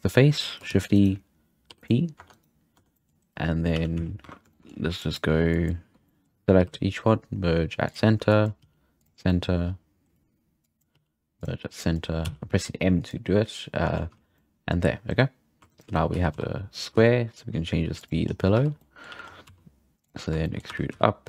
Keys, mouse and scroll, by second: 0.7 shift+d, 1.7 p, 2.1 Tab, 2.3 right click, 2.7 Tab, 2.9 middle drag, 3.7 a, 3.9 z, 4.2 1, 4.5 shift+middle click, 4.7 scroll up 2, 4.9 click, 5.5 click, 6.1 shift+middle click, 6.5 m, 8.3 click, 8.6 m, 9.3 middle click, 9.8-10.6 scroll down 2, 10.6 click, 10.9 m, 11.7 click, 12.2 m, 13.1 m, 13.9 alt+a, 14.1 z, 14.1 scroll down 2, 14.3-15.2 middle drag, 15.6 2, 15.7 right click, 15.9 z, 16.1 g, 18.2-18.7 scroll up 3, 18.5 z, 18.7 scroll down 2, 18.7-19.1 middle drag, 19.1 a, 19.2-19.5 scroll up 1, 19.5 s, 20.4 shift+middle click, 20.7 e.